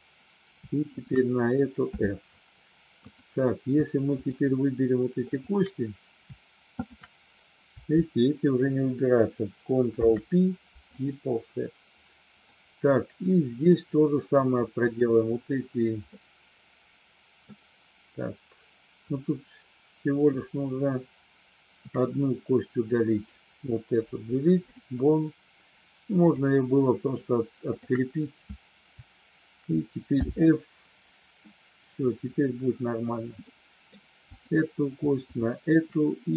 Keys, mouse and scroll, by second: 0.9 click, 1.8 f, 4.1 shift+click, 5.3 shift+click, 6.8 shift+click, 9.9 ctrl+p, 12.4-13.7 middle drag, 14.8 click, 16.1-17.5 middle drag, 23.9 Delete, 30.1 f, 33.5 middle click, 34.3 click, 35.3 shift+click.